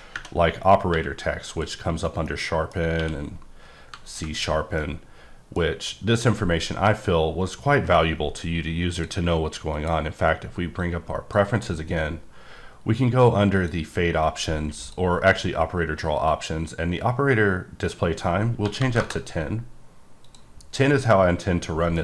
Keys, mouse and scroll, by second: 0.9 q, 1.5 click, 2.3 middle click, 2.8 scroll down 1, 3.0 q, 4.1 ctrl+click, 4.8 middle click, 9.0 click, 9.7 click, 11.0 click, 11.7-12.5 scroll down 3, 13.6 click, 14.8 click, 15.2-16.1 scroll down 2, 16.1-17.8 scroll down 2, 17.8 click, 18.6 1, 18.8 KP_0, 19.0 KP_Enter, 20.2 click, 21.1 middle click.